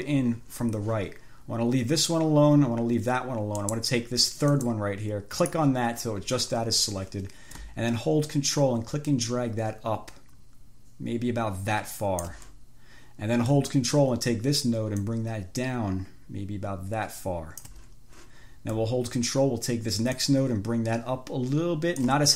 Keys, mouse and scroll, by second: 3.9 click, 4.8 click, 5.6 click, 8.8-12.7 ctrl+drag, 15.2-18.1 ctrl+drag, 20.4-22.3 ctrl+drag.